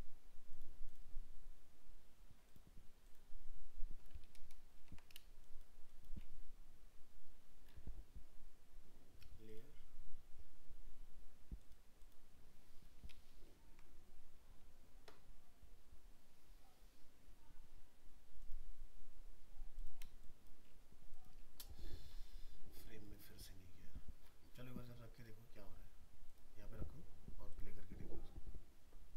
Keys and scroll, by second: 13.3 ctrl+-.